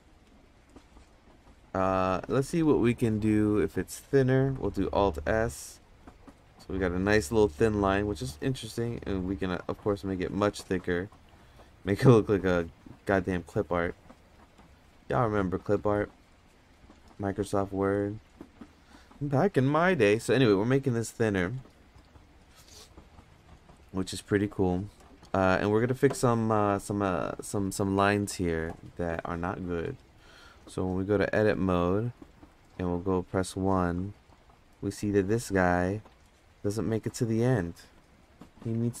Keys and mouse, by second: 1.3 Tab, 2.2 Tab, 4.4 alt+s, 6.2 Tab, 7.8 Tab, 8.2 alt+s, 9.6 alt+s, 10.8 Tab, 11.1 Tab, 12.5 Tab, 13.1 alt+s, 14.8 Tab, 15.8 alt+s, 16.8 Tab, 17.2 alt+s, 18.1 Tab, 20.2 Tab, 20.7 alt+s, 21.5 Tab, 29.4-30.1 drag, 33.2 1, 35.6 click, 38.5 g.